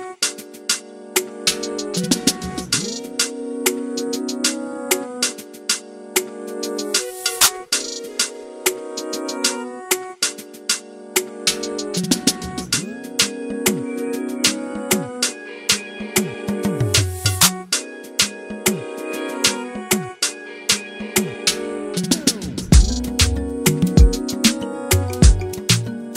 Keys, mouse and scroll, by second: 0.0 scroll down 2, 0.1-0.9 scroll up 2, 1.0 scroll down 2, 1.1 scroll up 2, 1.2-2.0 scroll down 3, 1.4-1.8 middle drag, 2.0 scroll up 1, 2.2 alt+a, 2.3 shift+middle drag, 2.4 click, 2.5-2.9 scroll down 2, 2.6 shift+middle click, 2.9 shift+d, 3.2 shift+middle click, 3.3 scroll up 3, 3.5 Tab, 3.6 shift+middle click, 3.8 KP_1, 4.2 alt+a, 4.3 scroll up 1, 4.5-4.9 scroll down 1, 4.9 alt+z, 5.0 scroll up 1, 5.1 scroll down 1, 5.2 shift+middle click, 5.3-5.7 scroll up 1, 5.9 click, 6.3 scroll down 1, 6.4-7.0 scroll up 1, 7.0 scroll down 1, 7.1 shift+middle click, 7.4-8.0 scroll up 3, 8.0 x, 8.4 ctrl+z, 9.2 x, 9.3 scroll up 1, 9.4 middle click, 10.0 click, 10.2 shift+middle click, 10.5 2, 10.7 click, 11.4 alt+z, 11.6 middle click, 12.2 e, 12.7 scroll up 1, 12.8 middle click, 13.1 click, 13.4 middle click, 14.0-16.3 typing, 16.3 scroll down 1, 16.4 scroll up 2, 16.5 middle click, 16.7 scroll down 1, 16.7 scroll up 1, 16.9 Tab, 17.0 alt+a, 17.1 middle click, 17.3 scroll down 1, 17.4 shift+middle click, 17.5 scroll up 1, 17.6-18.8 middle drag, 18.8-23.3 drag, 23.9 scroll down 4, 23.9 scroll up 2, 24.0-24.8 scroll down 3, 24.8 shift+middle click, 25.0 alt+a, 25.1-25.5 scroll up 2, 25.5 click.